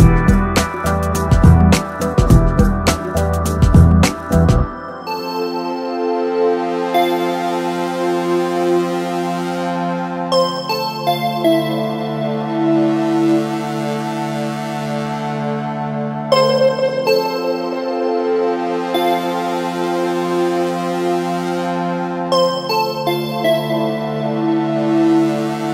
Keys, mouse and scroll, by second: 3.8 middle click, 5.0-11.4 right drag, 11.6 KP_0, 13.6 click, 14.3 click, 14.5 click, 15.5 middle click, 16.2 KP_0, 17.5 KP_0, 17.8 KP_0, 19.5 KP_0, 19.6 KP_0, 21.4 middle click, 22.0 click, 24.2 click, 24.5 middle click, 24.8 middle click, 25.0 middle click, 25.3 middle click.